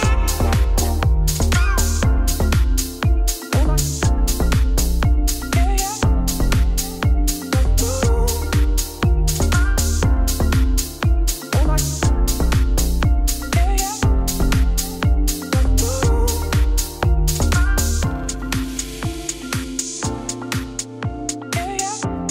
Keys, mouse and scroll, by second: 0.0 KP_1, 0.2 g, 1.3 middle click, 2.1 g, 2.6 middle click, 3.5-3.9 scroll up 1, 3.9 e, 5.5 shift+s, 6.0 Tab, 6.1 shift+s, 6.5 Tab, 7.0 shift+a, 8.7-9.7 drag, 9.7 1, 10.6 KP_7, 11.0 z, 11.2 g, 14.0 middle click, 14.3 f, 15.3 KP_1, 15.6 g, 16.0 shift+middle click, 16.2 scroll up 1, 16.4 shift+middle click, 17.3 g, 17.7 s, 18.2 ., 18.5 s.